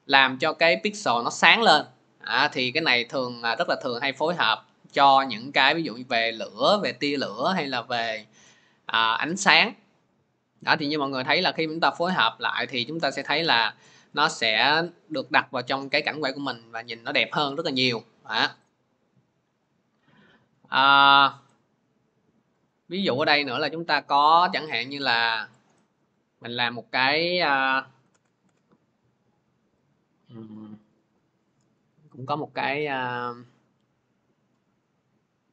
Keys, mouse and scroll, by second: 3.4-3.8 scroll, 18.4 click, 19.4 click, 23.3 click, 25.4 click, 25.5 click, 27.1-28.3 typing, 29.7 click, 30.8 click, 30.9 click, 33.0 click, 33.0-33.4 scroll, 34.7 scroll.